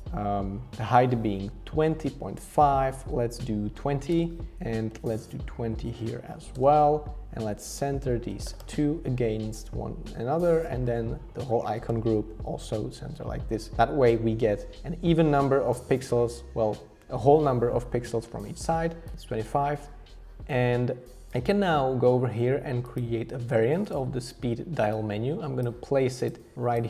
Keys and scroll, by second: 3.3-4.2 typing, 5.9-6.8 typing, 8.4 alt+h, 8.5-9.2 typing, 10.5 shift+Return, 11.8 alt+h, 11.9 alt+v.